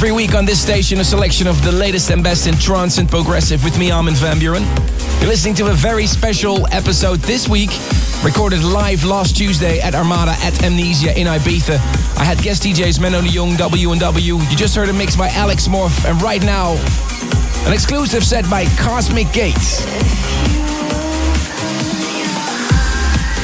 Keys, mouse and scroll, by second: 14.1 right click, 15.9-23.4 drag.